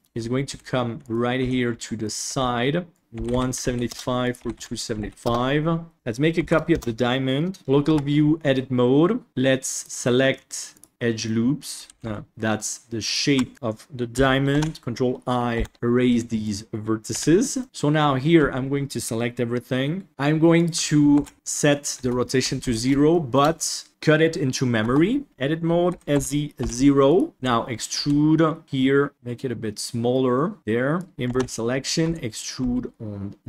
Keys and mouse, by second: 0.0 KP_1, 0.4 g, 1.3 r, 2.2 g, 3.0 click, 4.2-5.3 drag, 5.9 ctrl+shift+s, 6.3 shift+d, 7.6 KP_Divide, 7.8 Tab, 8.5 middle click, 9.7-10.9 drag, 11.2 middle click, 11.8 ctrl+z, 13.0 ctrl+click, 14.5 ctrl+i, 15.5 Delete, 15.9 middle click, 17.5 middle click, 18.3 a, 20.1 Tab, 20.6 ctrl+click, 21.9 Tab, 22.5 alt+z, 23.0 shift+click, 24.8 Tab, 25.3 Tab, 25.8 s, 27.3 e, 29.1 s, 30.6 click, 31.2 ctrl+i, 32.0 e.